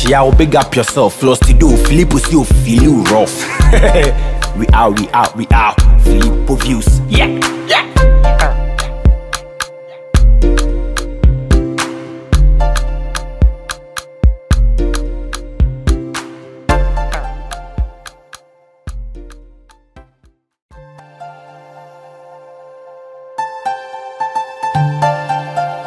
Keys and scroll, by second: 16.0 BackSpace, 21.1 Left, 22.7 BackSpace.